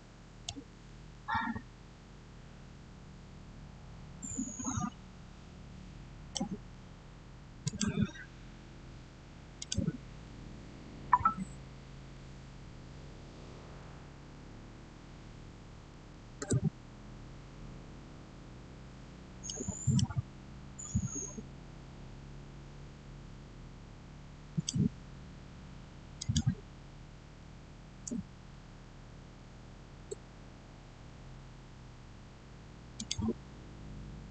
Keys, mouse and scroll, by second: 1.0-7.5 shift+middle drag, 7.5 click, 8.4 scroll up 1, 9.4 click, 15.7 6, 16.2 Return, 17.4-18.6 scroll down 1, 19.3 middle click, 19.3-22.1 middle drag, 24.4 click, 28.3-28.9 typing, 29.8 Return, 32.8 click.